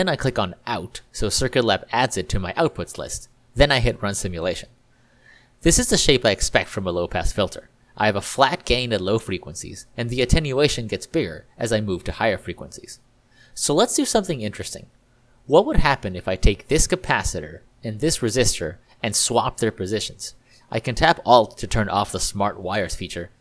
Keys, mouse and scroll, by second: 2.4 click, 16.9 click, 17.9 click, 18.4 click, 18.6 click, 23.3 alt+r.